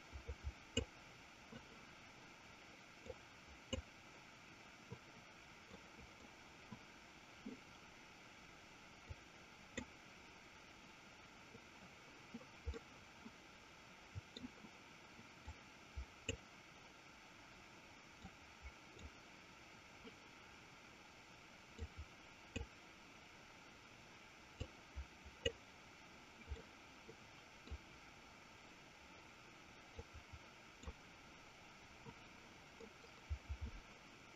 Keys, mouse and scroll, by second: 0.3-1.5 drag, 3.6 click, 6.2 click, 9.7 click, 12.9-14.7 middle drag, 16.2 click, 18.7-20.0 drag, 22.3 click, 25.2-26.4 drag, 26.7-27.9 middle drag, 30.5-31.7 drag, 33.0-34.3 middle drag.